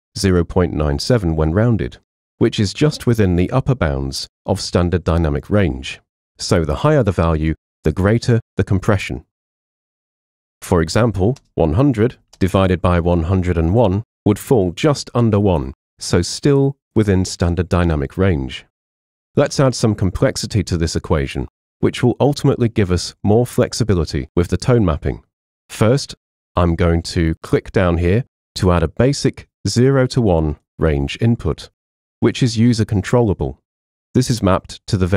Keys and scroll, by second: 9.9 super+a, 10.2-13.9 typing.